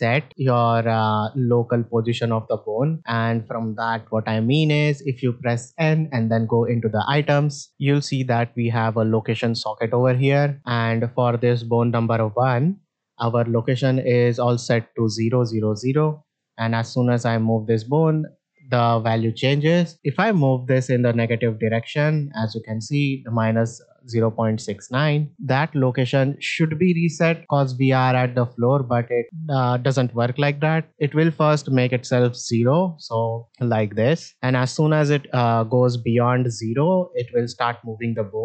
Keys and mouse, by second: 0.3 shift+middle drag, 1.9 middle drag, 4.1 n, 6.1 click, 10.6 middle drag, 17.0-18.8 drag, 19.9-22.3 drag, 33.0-38.4 drag.